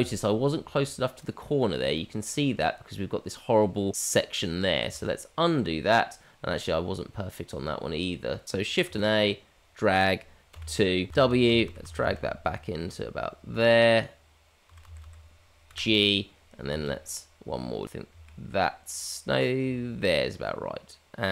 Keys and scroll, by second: 4.8 ctrl+z, 8.9 shift+a.